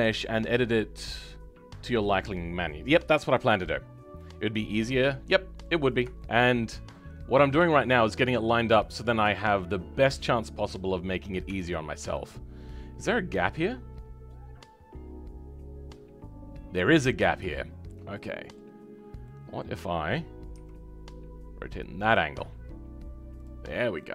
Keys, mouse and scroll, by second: 4.7-5.1 scroll up 2, 5.1-8.1 middle drag, 8.1-8.5 scroll up 3, 8.5-11.4 middle drag, 11.4 Tab, 11.7-12.1 scroll up 2, 12.1-18.9 middle drag, 18.9-19.2 scroll down 2, 19.2-20.5 middle drag, 20.5 r, 23.6-24.0 scroll down 3, 24.0-24.1 middle drag.